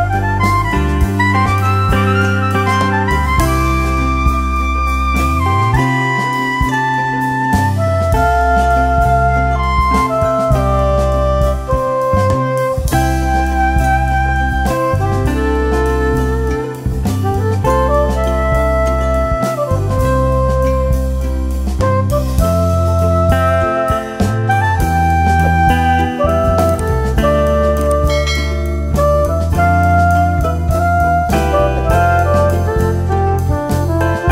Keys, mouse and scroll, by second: 0.0 click, 4.6 ctrl+q, 5.0 ctrl+u, 6.9 click, 8.3 F12, 9.5 click, 20.3-23.5 drag, 23.8 F3, 24.4 F2, 24.7-30.7 drag, 30.7 shift+Page_Up, 31.5 F2, 31.8-34.3 drag.